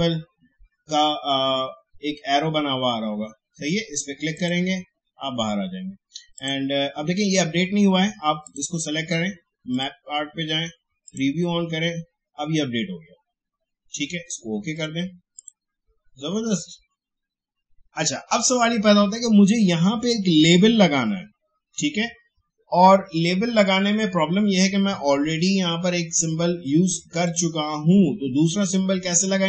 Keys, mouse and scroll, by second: 3.6 shift+scroll down 1, 4.3 click, 14.7 click, 27.2 click.